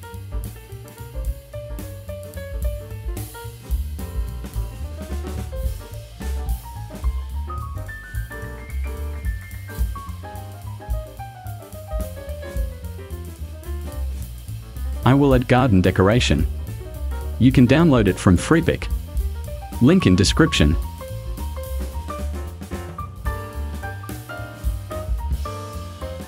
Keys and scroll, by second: 2.5 shift+b, 4.9 BackSpace, 7.0 BackSpace, 7.2 Right, 7.8 BackSpace, 7.9 2, 8.4 Escape, 13.6 Delete.